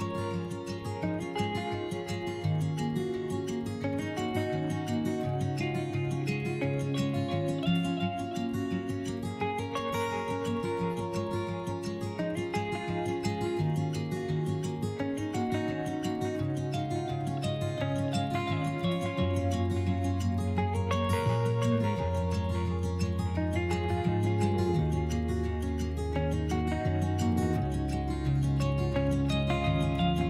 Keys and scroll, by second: 15.7 s, 24.2 ctrl+z, 24.5 s.